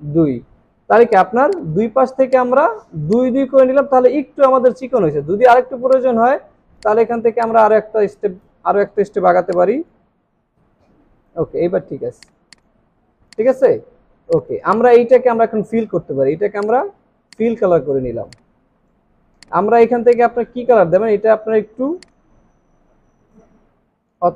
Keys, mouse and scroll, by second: 1.5 double click, 2.2 space, 2.7 alt+scroll down 1, 3.0 space, 5.2 alt+scroll up 1, 8.4 Left, 12.5 double click, 13.1 alt+scroll down 1, 13.9 alt+scroll down 1, 17.8 alt+scroll up 1, 18.7 space, 19.1 alt+scroll down 2.